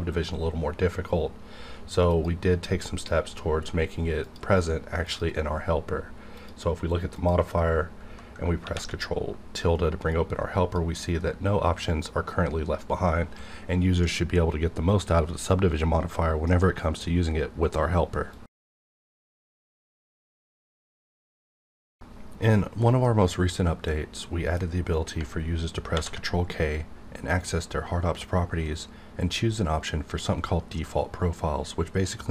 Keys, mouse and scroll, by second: 2.1 click, 2.1 click, 2.4 right click, 4.2 click, 5.0 click, 8.6 ctrl+`, 10.0-13.6 drag, 24.2-25.9 middle drag, 25.9 ctrl+k.